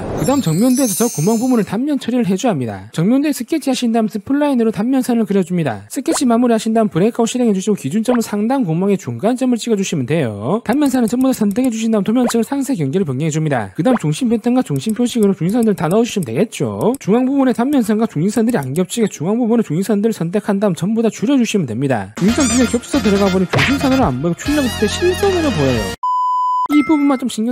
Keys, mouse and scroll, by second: 0.0 click, 0.4 click, 0.8 click, 1.4 click, 2.3 click, 2.7 click, 3.2 click, 3.6 click, 3.9 middle click, 4.3 click, 4.6 click, 5.0 click, 5.2 click, 5.6 click, 6.1 right click, 6.7 click, 7.1 c, 7.4 click, 8.6 click, 9.5 click, 10.9 shift+click, 11.3 shift+click, 11.8 shift+click, 12.3 click, 13.4 click, 13.9 click, 14.3 click, 14.6 click, 15.0 click, 15.4 click, 15.7 click, 15.9 click, 16.2 click, 16.4 right click, 16.6 click, 17.0 click, 17.5 click, 17.8 click, 18.2 click, 18.5 click, 18.9 click, 19.5 click, 19.9 click, 20.4 click, 20.9 click, 21.3 click, 21.5 click, 21.9 click, 22.2 click, 22.6 click, 22.8 click, 23.0 click, 23.3 click, 24.6 click, 25.1 click, 25.3 click, 26.8 click, 27.1 click.